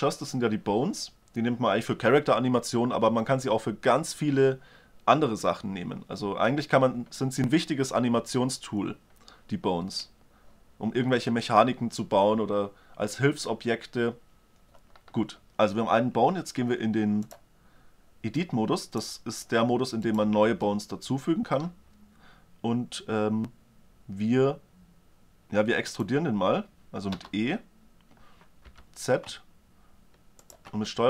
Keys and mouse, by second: 14.6-16.3 drag, 19.7-21.8 middle drag, 26.8 e, 30.6-31.0 middle drag.